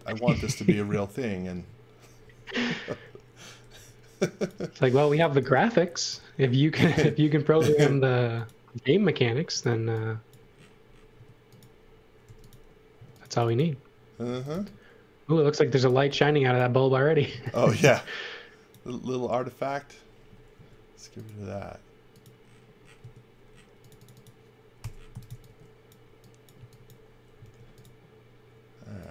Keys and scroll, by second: 1.5 space, 2.2 m, 3.7 l, 5.4 e, 7.6 l, 9.7 e, 11.1 space, 12.4 j, 12.9 space, 14.0-15.0 typing, 16.1-18.0 typing, 20.5 l, 23.0 space, 24.5-27.4 typing.